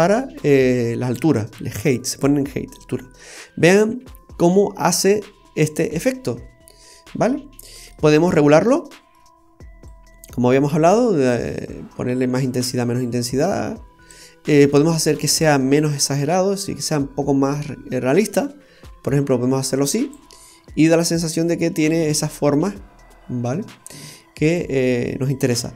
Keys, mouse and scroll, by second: 2.9-3.3 scroll up 1, 3.3-3.9 scroll down 1, 3.9 scroll down 1, 4.5 middle click, 7.2-7.6 scroll down 3, 7.6 middle click, 8.1-8.5 scroll up 4, 8.8 middle click, 9.8 click, 16.2 click, 20.5-21.9 scroll down 2, 21.0 middle click, 24.4-24.9 scroll down 1, 24.9 middle click, 24.9 scroll down 2.